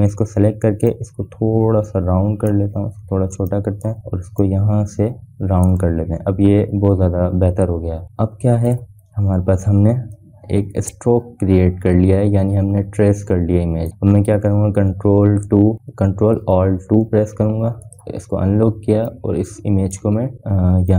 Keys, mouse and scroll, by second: 2.6-4.6 drag, 4.6 scroll down 1, 4.7 click, 5.0 space, 6.1-8.9 drag, 9.0 scroll down 1, 10.1 v, 10.3-15.9 drag, 15.9-16.4 scroll down 2, 18.7 ctrl+alt+2, 19.5-20.9 drag.